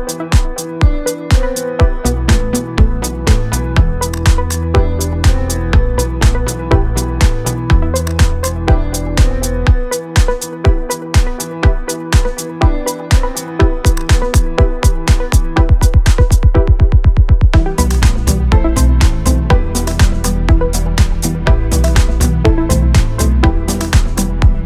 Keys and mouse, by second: 0.8 click, 0.8 d, 1.4 shift+click, 1.7-2.0 d, 1.7 click, 1.9 click, 4.3 shift+middle click, 4.8 click, 4.8-5.2 d, 5.0 click, 5.2 click, 5.6 d, 5.7 right click, 5.9 d, 6.0 middle click, 6.0 d, 7.0 middle click, 7.2-9.1 typing, 7.4 shift+middle click, 7.8 click, 8.2 click, 8.8 click, 9.0 click, 9.1 right click, 9.2 ctrl+z, 9.4 middle click, 9.5 shift+middle click, 9.9 middle click, 10.1 middle click, 10.3 middle click, 10.8-14.0 typing, 11.2 shift+middle click, 11.3 click, 11.7 right click, 12.7 click, 13.0 click, 13.7 click, 14.0 right click, 16.6 click, 18.0 Tab, 19.1-22.1 drag, 22.1-24.6 typing, 22.9 click, 23.1 click, 23.3 click, 23.5 click, 23.8 click, 23.9 middle click, 24.3 middle click.